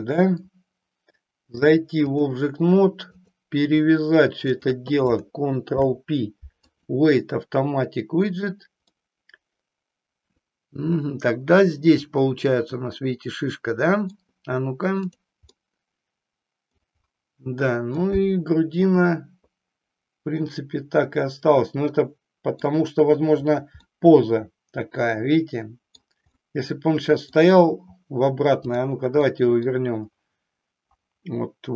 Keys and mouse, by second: 1.5 click, 3.1 click, 4.5 shift+click, 5.6 ctrl+p, 8.9-14.3 middle drag, 15.5-16.8 middle drag, 17.9-22.6 middle drag, 24.0-26.0 middle drag, 26.4 middle click, 28.6 click, 29.3 middle click.